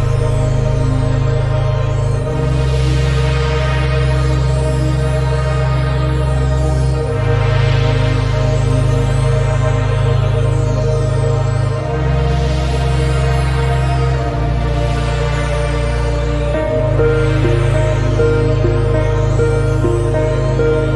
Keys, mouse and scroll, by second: 1.0-2.8 shift+middle drag, 2.8 scroll up 1, 3.3 alt+z, 3.5 click, 4.3 scroll down 2, 4.7 alt+z, 5.4 KP_3, 5.8 scroll up 1, 6.4 shift+middle click, 7.4 g, 13.0-13.5 scroll down 5, 13.5-14.5 middle drag, 14.5 KP_7, 14.8 scroll up 1, 15.3 Tab, 15.6 scroll down 2, 15.8 shift+middle click, 16.7 g, 20.8 Tab.